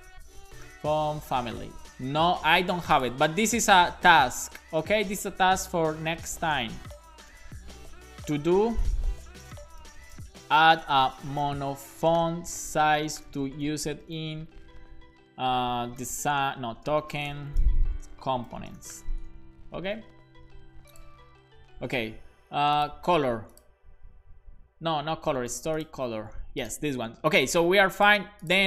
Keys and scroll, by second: 0.1-1.6 typing, 2.3 Escape, 3.7 super+Right, 4.5 super+Left, 5.5 shift+super+Right, 6.0 Right, 6.4 Return, 7.3-11.5 typing, 13.0-14.5 typing, 15.6-18.3 typing, 19.3 super+s.